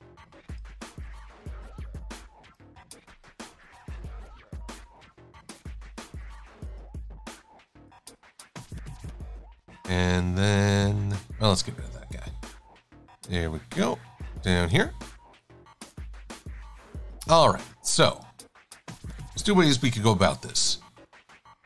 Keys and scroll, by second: 11.8 Delete, 17.7 v, 19.1 super+-, 19.3 super+-, 20.1 i.